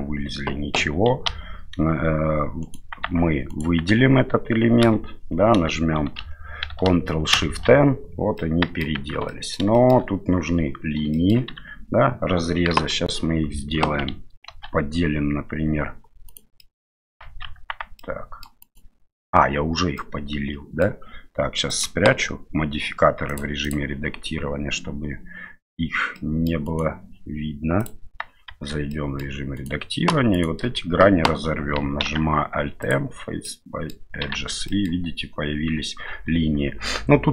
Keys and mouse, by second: 0.8 a, 1.3 a, 2.6 right click, 3.0 Tab, 3.5 right click, 3.9 Tab, 4.8 a, 6.2 shift+n, 7.3 ctrl+shift+n, 8.4 middle click, 8.9 Tab, 9.3 middle click, 9.7 shift+middle click, 11.1 shift+middle click, 11.6 Tab, 12.7 KP_1, 14.4 ctrl+r, 16.6 middle click, 17.4 Tab, 18.0-18.4 middle drag, 18.6 right click, 19.9 middle click, 21.7 click, 23.3 click, 23.6 click, 26.1-26.5 middle drag, 26.6 right click, 27.8 click, 28.5 Tab, 28.9 middle click, 29.5 right click, 32.0 alt+m, 33.4 middle click, 34.3 Tab, 34.6 middle click, 36.1 Tab.